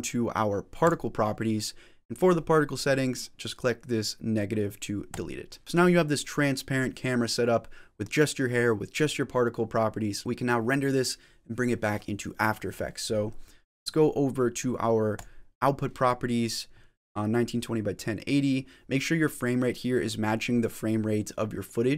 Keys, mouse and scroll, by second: 0.7 click, 4.9 click, 5.6 click, 15.0 click.